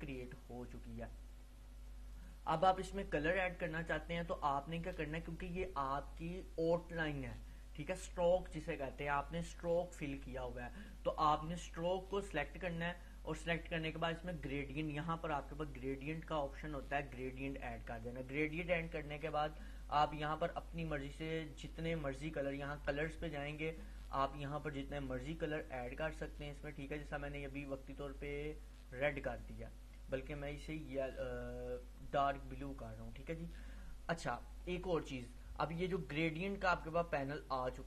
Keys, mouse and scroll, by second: 12.4 click, 17.3 click, 20.5 click, 23.5 click, 29.1 click, 33.2 click, 37.7-37.8 drag.